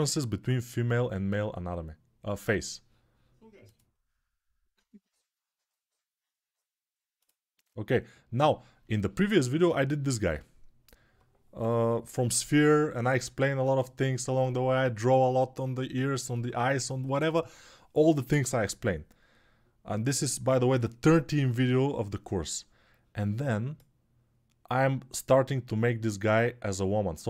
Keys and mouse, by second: 3.5-23.8 middle drag, 23.8-27.2 drag.